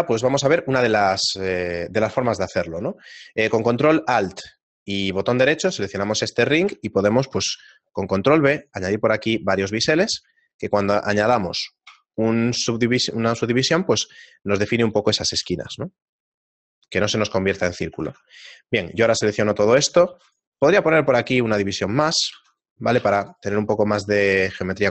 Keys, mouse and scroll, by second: 1.4 shift+middle click, 2.4 shift+middle click, 4.4 ctrl+alt+right click, 7.4 ctrl+b, 12.5 shift+middle click, 15.4 t, 16.9 click, 17.7 shift+middle click, 19.7 Tab, 19.7 alt+right click, 20.3 ctrl+r, 21.0 ctrl+r, 21.7 shift+middle click, 22.8 ctrl+r, 22.8 click, 23.4 ctrl+r, 23.7 shift+middle click, 24.6 ctrl+r.